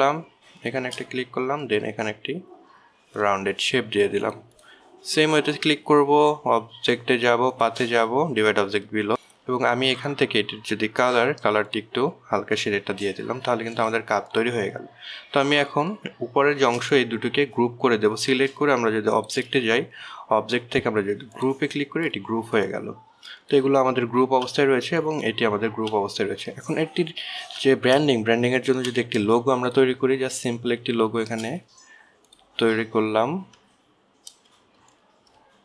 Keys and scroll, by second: 25.6 ctrl+z, 27.1 ctrl+z, 29.4 alt+space.